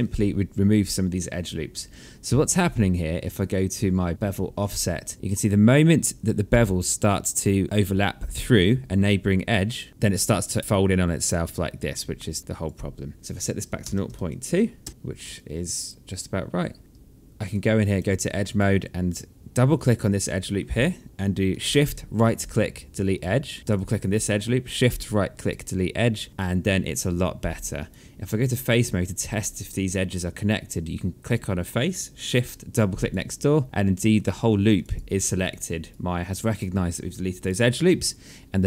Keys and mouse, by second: 3.7 click, 9.7 click, 12.9 click, 13.1 KP_0, 13.3 KP_Decimal, 14.1 KP_Enter, 14.9 alt+click, 16.3 alt+middle click, 16.8 right click, 17.5 alt+click, 19.0 click, 21.0 shift+right click, 23.1 click, 24.0 shift+right click, 27.1 right click, 30.5 click, 32.3 shift+click, 33.6 click, 34.0 shift+click, 35.6 right click, 36.4 alt+click, 37.1 alt+middle click.